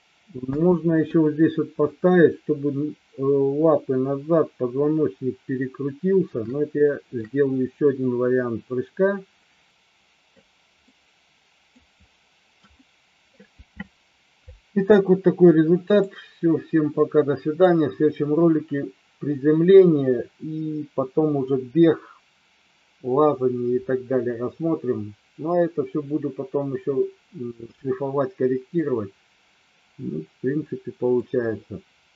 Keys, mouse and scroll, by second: 0.7 space, 6.7-7.2 shift+middle drag, 9.7-10.4 drag, 11.0-11.8 middle drag, 12.8-13.4 shift+middle drag, 16.0 click, 17.0 middle click, 27.9-28.9 middle drag, 30.8 middle click.